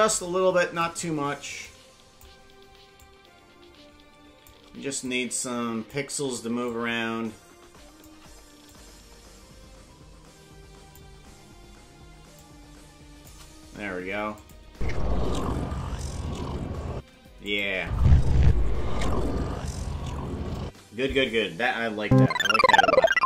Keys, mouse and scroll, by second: 1.6 click, 2.9-4.5 shift+drag, 5.0 click, 6.6-8.0 shift+drag, 8.7-10.9 drag, 12.3 shift+click, 14.3 click, 14.7 space, 16.9 space, 17.4 click, 17.8 space, 20.6 space.